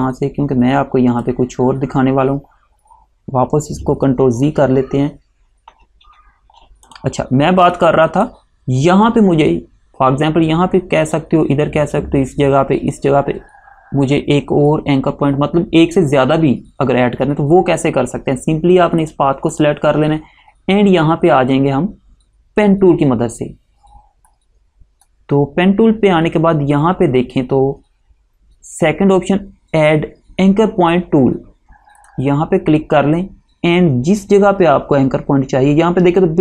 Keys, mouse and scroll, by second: 7.0 click, 19.1 click, 24.4 click, 32.1 click.